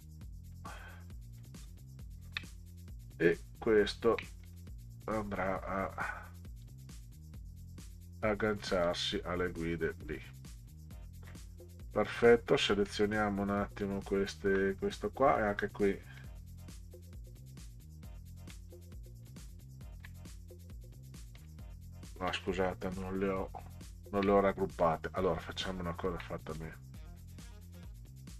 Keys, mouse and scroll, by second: 1.6-2.2 ctrl+scroll down 6, 2.7 middle click, 3.6-4.0 ctrl+scroll up 6, 4.4 click, 6.6 click, 8.9-10.2 drag, 11.1 shift+click, 11.6 middle click, 12.3 middle click, 12.9 middle click, 13.8 shift+click, 16.2 click, 18.0 click, 18.5 middle click, 19.4 ctrl+scroll down 2, 20.3 middle click, 21.4 click, 22.9 ctrl+z, 24.8 click, 25.4 ctrl+scroll up 4, 26.6-27.2 drag.